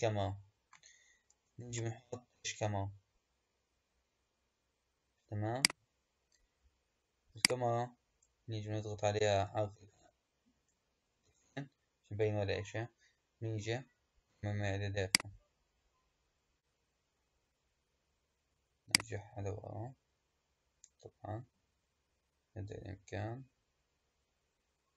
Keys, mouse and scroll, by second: 1.5 shift+a, 7.2 click, 9.1 KP_0, 10.5 KP_0, 11.1 KP_0, 14.9 click, 18.8-21.9 drag.